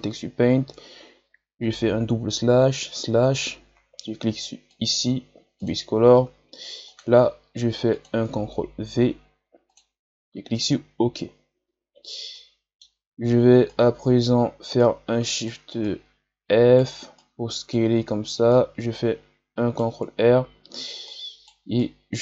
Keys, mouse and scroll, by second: 2.3 KP_Divide, 2.8 KP_Divide, 9.6 click, 11.3-12.2 scroll down 2, 12.2-13.6 middle drag, 13.6-20.4 right drag, 20.4 scroll down 2, 21.0-22.2 right drag.